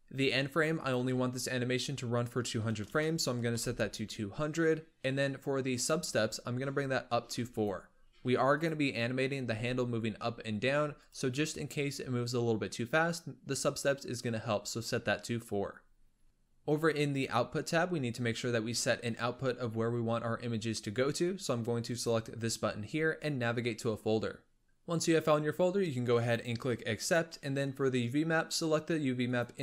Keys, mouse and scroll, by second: 0.6-2.8 drag, 2.8 KP_0, 5.6-7.5 drag, 8.4 click, 9.3 g, 11.2 click, 16.1-17.0 scroll down 2, 17.0-17.4 drag, 17.4-18.2 scroll down 5, 18.2-18.6 scroll down 1, 21.8-24.6 drag, 26.9-29.6 drag.